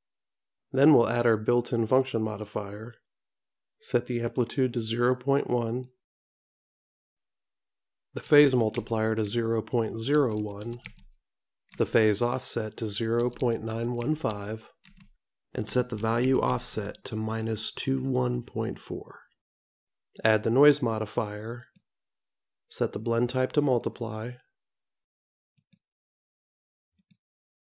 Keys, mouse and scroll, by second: 2.3 click, 5.9 click, 21.7 click, 25.7 click.